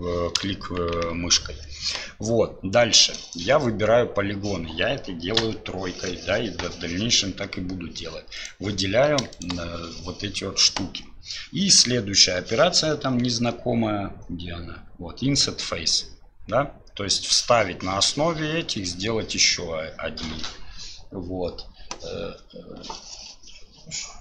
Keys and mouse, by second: 0.5 KP_1, 1.1 KP_3, 5.4 3.